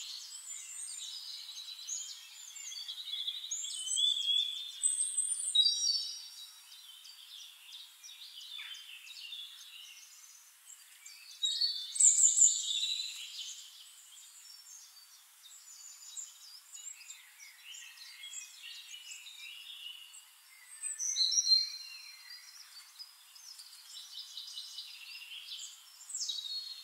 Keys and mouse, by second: 2.5-3.4 middle drag, 4.2-7.2 drag, 8.4 click, 10.0-12.7 drag, 13.4-15.0 drag, 15.5 middle click, 16.4-18.0 drag, 18.8-19.8 drag, 20.4 click, 21.5-22.5 middle drag, 22.5 click, 23.0 middle click, 24.6 middle click, 26.1 click, 26.4 middle click.